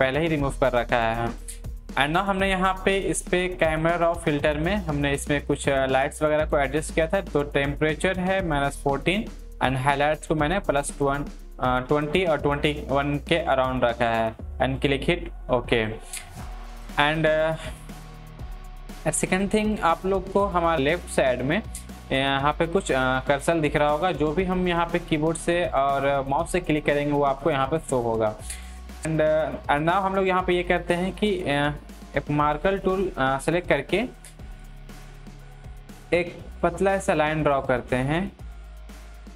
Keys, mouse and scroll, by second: 8.7 click, 8.7-13.2 drag, 14.8 click, 14.9-20.7 drag, 23.2 click, 27.4 click, 27.4-32.9 drag, 32.9-35.9 drag, 36.6 click, 36.6-39.3 drag.